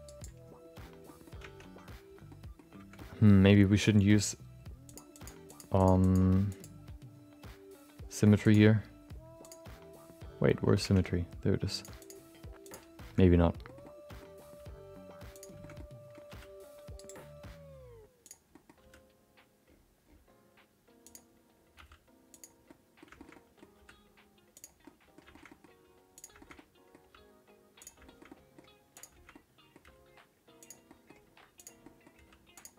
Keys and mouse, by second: 1.0 middle click, 1.7 Tab, 2.2 middle click, 2.9 middle click, 4.8 click, 5.2 click, 5.4 click, 5.8 click, 10.8 Tab, 12.6 click, 13.2 middle click, 13.6 middle click, 13.8 middle click, 14.4 g, 15.8 middle click, 16.2 r, 18.2 click, 18.5 middle click, 18.8 r, 21.7 g, 22.8 middle click, 23.2 shift+middle click, 23.7 r, 24.9 middle click, 25.3 shift+middle click, 26.1 click, 26.4 shift+middle click, 26.5 middle click, 27.1 g, 28.1 shift+middle click, 28.4 middle click, 28.9 click, 29.3 middle click, 29.8 g, 30.9 middle click, 31.5 click, 31.8 middle click, 32.1 g.